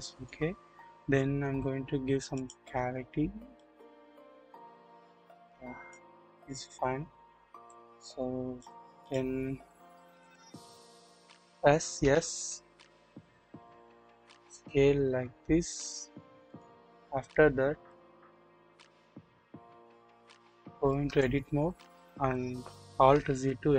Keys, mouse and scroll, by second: 6.7 scroll up 1, 7.1 scroll down 1, 7.7 click, 10.0 KP_1, 10.0 KP_1, 12.0 s, 16.8-17.1 scroll up 1, 17.6 scroll down 1, 18.4 scroll up 1, 21.0 Tab, 23.3 alt+z.